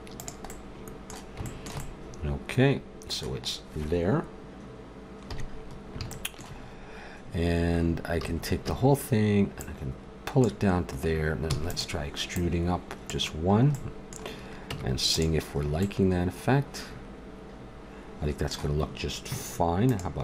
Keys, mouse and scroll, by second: 0.5 click, 5.3 KP_3, 8.1 a, 8.6 a, 9.6 click, 11.5 e, 13.5 middle click, 14.7 Tab.